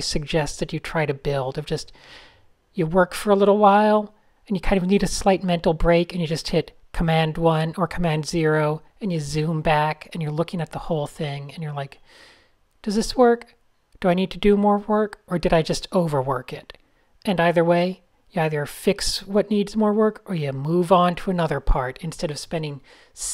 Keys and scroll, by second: 0.0-3.3 typing, 5.3 a, 5.6 shift+super+{, 5.9 super+z, 6.0 super+v, 6.4 shift+super+{, 6.6 shift+super+a, 8.6 a, 9.1 super+z, 9.7 super+,, 10.6 shift+super+a, 11.4 alt+super+[, 11.8 a, 13.7 shift+super+{, 13.9 alt+super+[, 14.2 shift+super+a, 14.3 super+space, 17.2 shift+super+a, 17.6 super+-, 17.6 super+-, 17.8 super+-, 19.4 Tab, 19.7 super+-, 20.5 Tab, 22.4 n.